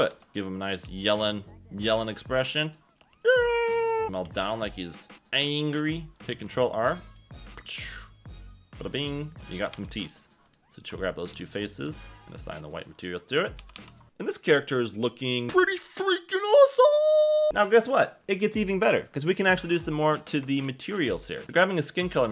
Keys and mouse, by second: 0.1 Tab, 0.3 g, 0.8 g, 1.8 click, 3.0 g, 4.0 shift+middle click, 4.2 g, 6.1 s, 6.3 ctrl+r, 7.1 click, 9.7 3, 10.0 click, 10.5 click, 10.9 shift+middle click, 12.4 click, 13.4 Tab, 13.6-14.8 typing, 14.0 Tab, 19.8 click.